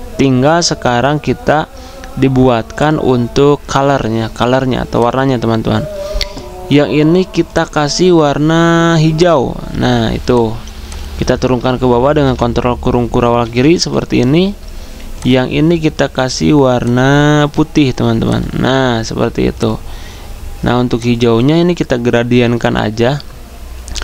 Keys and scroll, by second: 12.3 ctrl+[.